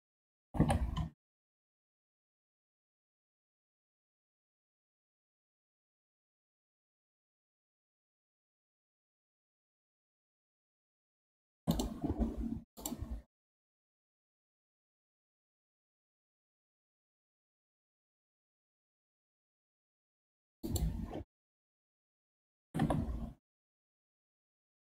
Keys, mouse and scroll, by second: 0.4 g, 12.8-15.9 drag, 22.6 g.